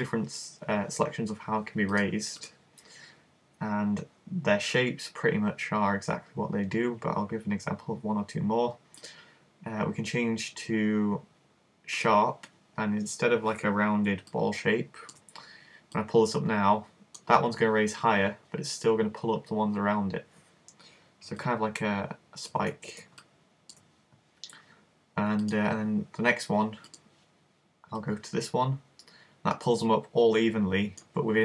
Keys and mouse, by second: 9.0 click, 14.3 click, 14.5 middle click, 16.0 click, 22.0 middle click, 22.7 super+z, 25.6 click, 28.1 click.